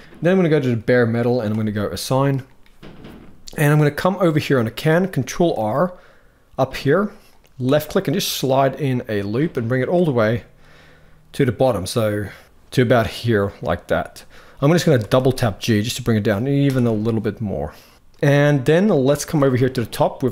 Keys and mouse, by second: 0.1 click, 1.2 click, 1.6 middle click, 4.0 middle click, 5.3 ctrl+r, 9.8 middle click, 12.3 g, 12.5 middle click, 14.7 g, 18.5 middle click, 18.9 shift+middle click.